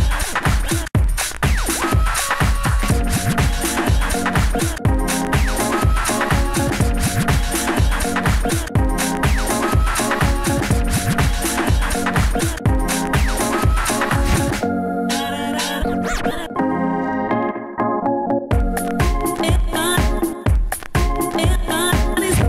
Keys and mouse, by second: 0.7 s, 1.8 s, 2.8 s, 5.8 s, 6.9 s, 7.0 f, 7.5 shift+f, 8.3 f, 9.3-12.1 typing, 13.4 s, 14.8 click, 14.8-16.7 typing, 18.5 f, 18.9 f, 19.1 s, 19.2-21.3 drag, 19.7 s, 21.5 s.